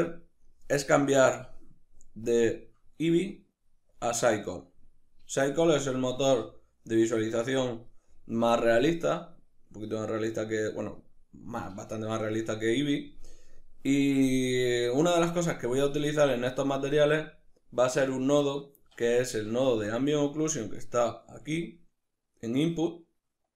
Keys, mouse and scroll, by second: 1.3 click, 2.3-5.8 drag, 5.8-23.5 middle drag, 6.1 z, 19.7 shift+a.